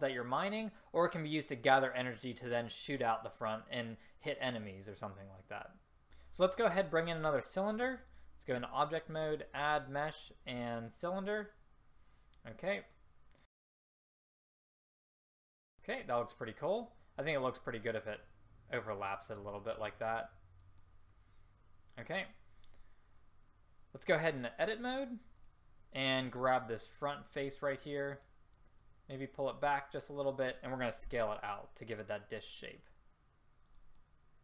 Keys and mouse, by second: 13.5 r, 14.0 click, 14.0 r, 14.5 click, 15.0 click, 15.7 middle click, 18.4-20.9 middle drag, 24.2 middle click, 27.5-31.2 middle drag, 31.2 s.